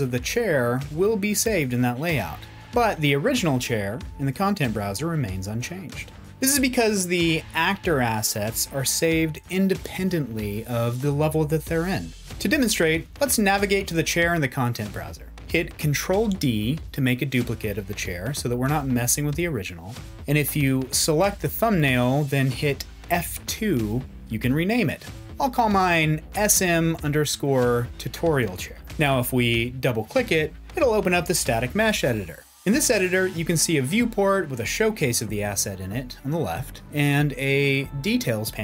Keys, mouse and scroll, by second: 15.4 ctrl+d, 23.1 F2.